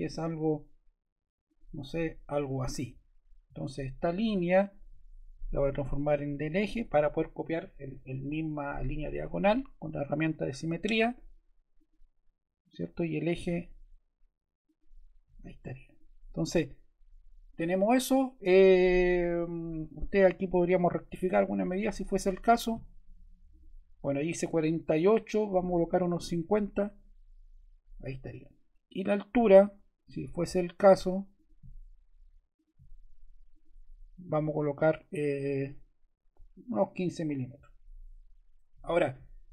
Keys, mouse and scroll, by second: 2.4 ↺, 11.7 click, 13.1 click, 14.6 click, 15.8 click, 20.6 d, 25.8-26.7 typing, 26.8 Return, 29.6 ↺, 30.0 d, 34.5-35.6 typing, 37.0 Return, 38.4 ⟲.